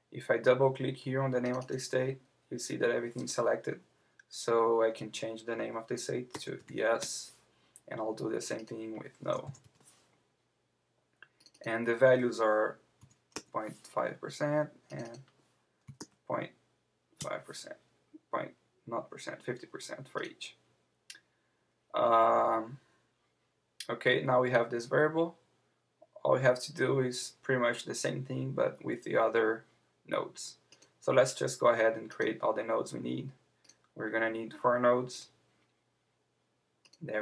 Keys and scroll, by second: 7.0 Return, 17.2 Return.